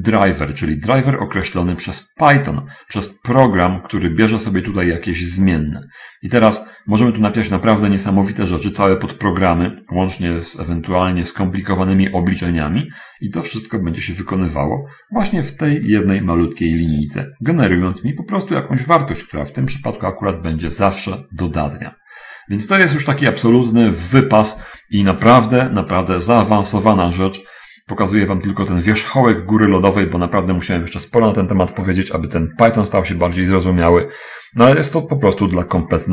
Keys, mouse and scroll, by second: 0.4-2.0 drag, 18.3 click.